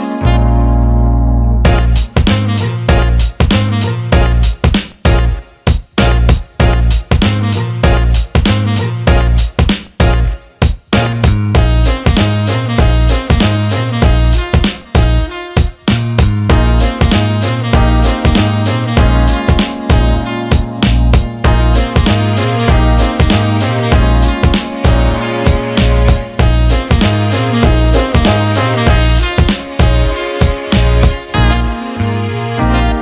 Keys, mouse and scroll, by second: 5.8 click, 8.1 ctrl+KP_Add, 11.0 ctrl+i, 13.4 click, 14.1 click, 20.9 click, 21.9 alt+middle click, 22.8 shift+click, 23.6 alt+middle click, 24.3 shift+click, 26.2 alt+middle click, 29.4-31.2 drag.